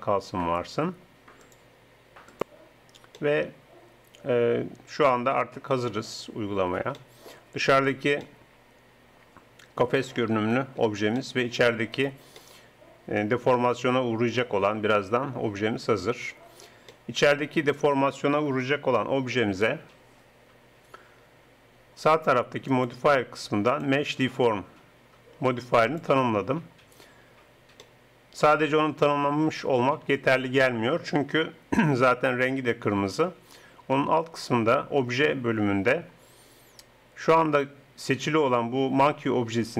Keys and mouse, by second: 5.2-7.0 middle drag, 8.4-9.4 drag, 9.4 middle click, 11.2-13.4 middle drag, 13.4 click, 13.5 middle click, 14.3 middle click, 16.9-18.9 middle drag, 22.7-25.9 drag, 27.9-29.7 middle drag.